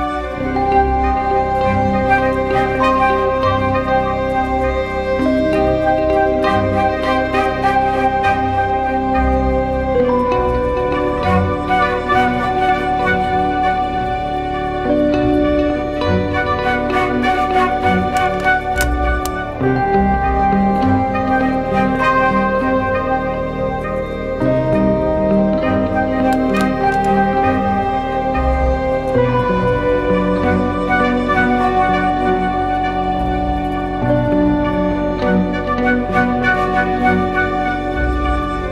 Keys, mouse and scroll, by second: 7.6 ctrl+=, 7.9 ctrl+-.